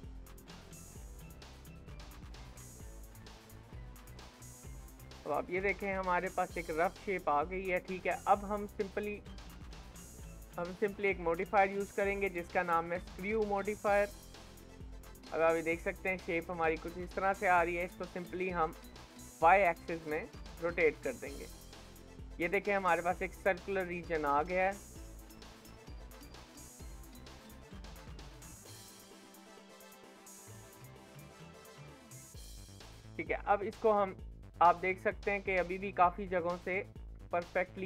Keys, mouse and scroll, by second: 1.0 e, 3.5-3.9 scroll down 2, 3.9 shift+middle click, 4.3-5.0 scroll down 3, 5.0 Tab, 5.5 shift+middle click, 5.8 scroll up 3, 6.3-8.1 shift+middle drag, 8.1-8.7 scroll down 4, 8.7 middle click, 9.6 KP_1, 10.4-12.1 shift+middle drag, 14.5-17.9 shift+middle drag, 17.9 click, 20.4 shift+middle click, 20.8-21.2 scroll up 5, 21.2-23.2 shift+middle drag, 23.2-23.5 scroll down 5, 23.5-27.1 middle drag, 27.1 KP_7, 28.0 shift+middle click, 28.8 g, 33.4-35.1 scroll up 13, 33.9 shift+middle click, 35.1-37.0 shift+middle drag, 37.0 scroll down 3, 37.3-37.8 shift+middle drag.